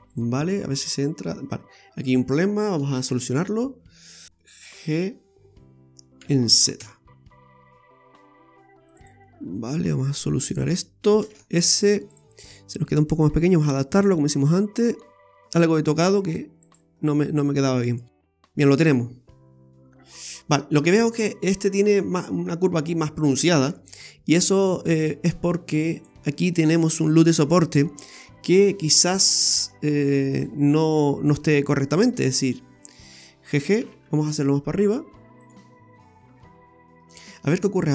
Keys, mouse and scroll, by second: 0.1 click, 0.6 middle click, 2.0 right click, 2.5 middle click, 3.1 Tab, 4.2 scroll up 1, 4.4 middle click, 6.2 g, 9.3 scroll up 1, 9.6 middle click, 10.6 scroll up 1, 11.3 shift+s, 12.4-12.8 scroll down 2, 12.8 s, 17.0 scroll down 2, 17.2 middle click, 19.5-19.9 scroll up 1, 20.2-20.5 scroll up 4, 20.8 middle click, 23.6 Tab, 24.6 middle click, 26.1 click, 26.3 scroll up 1, 26.6 middle click, 29.1 click, 29.7 middle click, 32.2 alt+shift+right click, 32.4 alt+shift+right click, 32.8 alt+shift+right click, 33.8 g, 35.7 middle click, 37.1 scroll down 1.